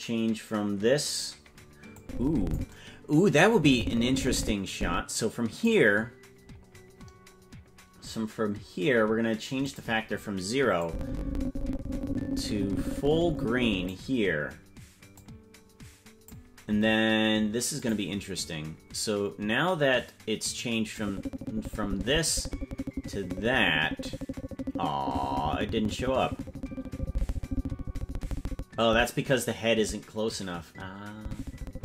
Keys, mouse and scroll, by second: 1.9 click, 3.5-5.7 drag, 9.6 click, 10.8-13.9 drag, 15.1-16.3 drag, 18.0 click, 21.0-31.8 drag.